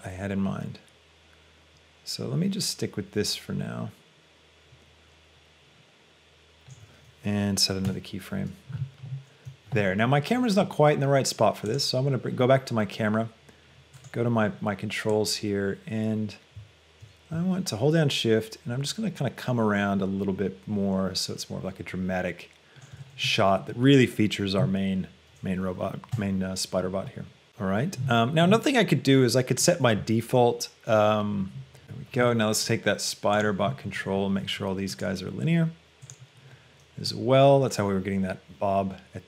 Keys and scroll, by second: 26.4 |, 34.4 a.